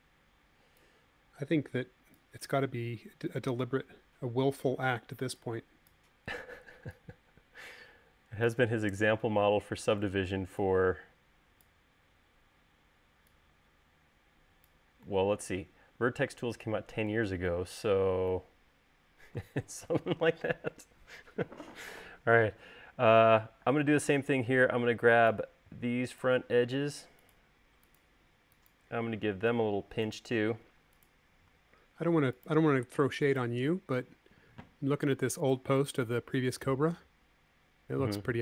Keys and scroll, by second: 24.6 space.